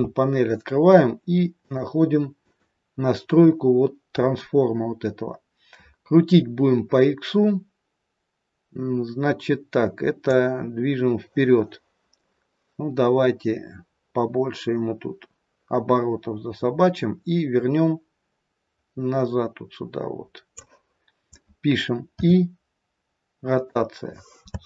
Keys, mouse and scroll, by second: 1.5 click, 2.3 click, 10.2 click, 24.5 space.